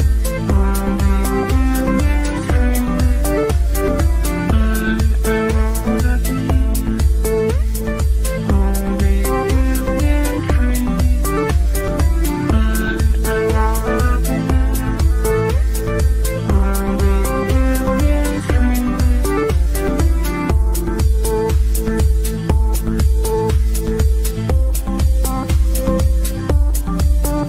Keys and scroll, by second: 7.0 Delete, 11.1 Delete, 13.9 Delete, 21.7 g.